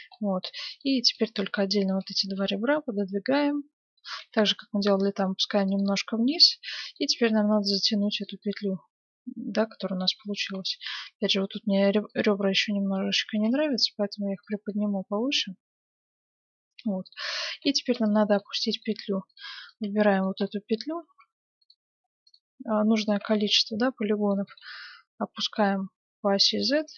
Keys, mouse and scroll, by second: 0.7-2.9 right drag, 1.5-3.0 middle drag, 2.0-3.8 drag, 4.2 g, 5.8 middle click, 7.1 ctrl+Tab, 9.1-10.3 middle drag, 10.7-12.2 middle drag, 11.0 ctrl+Tab, 12.0-14.7 right drag, 13.3 g, 14.7-16.8 middle drag, 17.7 ctrl+Tab, 18.4-22.1 middle drag, 19.3-21.3 right drag, 22.0-24.6 right drag, 23.6-25.4 middle drag, 24.4 g.